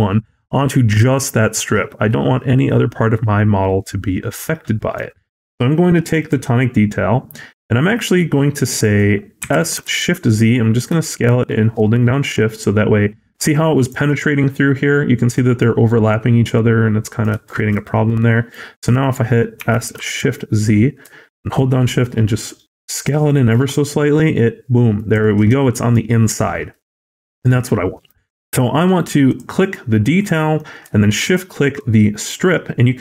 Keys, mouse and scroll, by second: 0.0 shift+middle click, 0.0 click, 0.1 click, 1.1 middle click, 1.5 scroll up 1, 1.9 middle click, 6.1 click, 8.0-8.3 scroll down 5, 8.7 scroll down 6, 9.3 s, 15.2 middle click, 15.5 scroll up 1, 16.0 middle click, 17.3 shift+middle click, 17.6 scroll up 1, 18.2 middle click, 18.6-19.1 scroll down 1, 19.5 s, 25.4 middle click, 26.4-27.0 scroll down 3, 26.6 middle click, 27.0 a, 27.5 middle click, 28.0-28.6 scroll up 2, 29.1 click, 30.1 middle click, 31.1 shift+click.